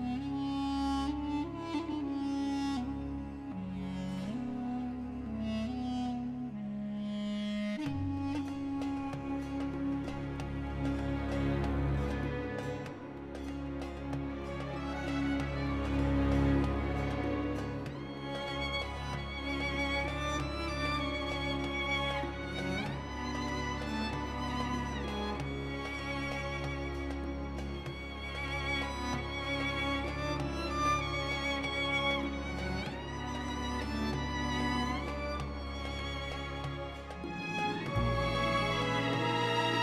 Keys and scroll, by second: 0.9 shift+z, 4.3 Tab, 5.4 a, 7.4 s, 7.9 1, 8.6 Return, 11.1 Tab, 15.7 g, 16.5 x, 32.1 shift+d, 33.1 x.